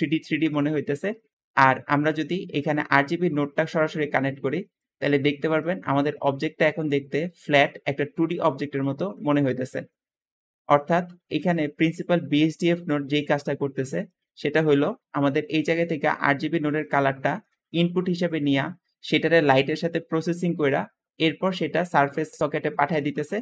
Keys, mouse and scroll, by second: 1.3 Escape, 12.3-13.4 shift+drag, 15.3 `, 22.2 click, 22.9 click.